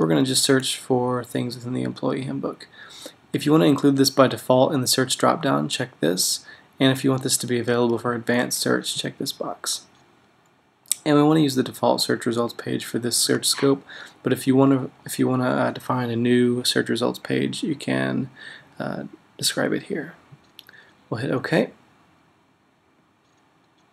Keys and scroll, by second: 0.0-0.3 typing.